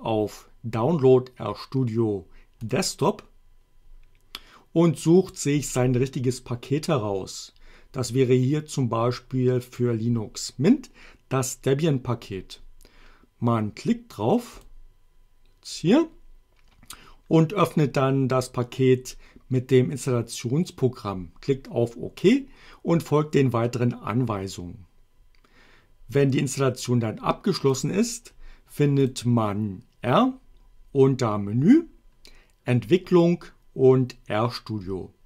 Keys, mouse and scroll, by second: 2.7 click, 6.9-10.0 drag, 14.6 click, 27.8 click, 29.2 click.